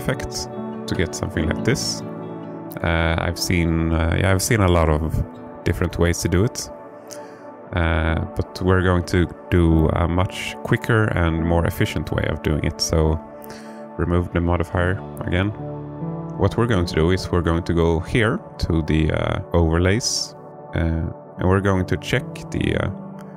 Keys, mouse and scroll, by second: 0.5 click, 1.2-2.3 alt+middle drag, 9.1-9.8 middle drag, 10.6-11.3 alt+middle drag, 13.9 click, 15.2 middle click, 18.9 click, 20.5-23.3 drag.